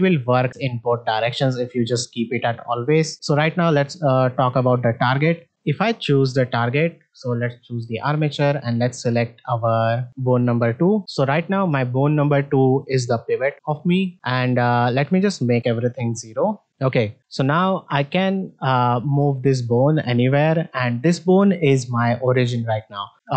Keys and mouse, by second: 6.2 click, 8.7-10.4 drag, 13.3 click, 15.1-16.7 drag, 17.8-19.6 drag, 20.0 middle drag.